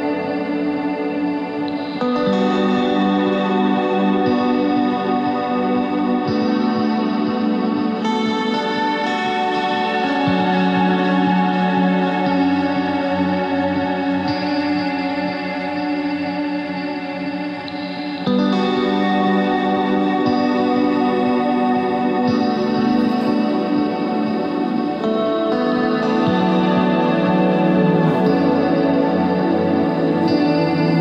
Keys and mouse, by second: 0.9 Tab, 4.7 Tab, 6.3 ctrl+r, 7.5 ctrl+b, 9.9 ctrl+r, 11.4 click, 12.1 ctrl+Tab, 15.1 g, 16.0 ctrl+Tab, 19.5 ctrl+Tab, 21.5 s, 22.9 ctrl+Tab, 28.1 e, 29.7 KP_1.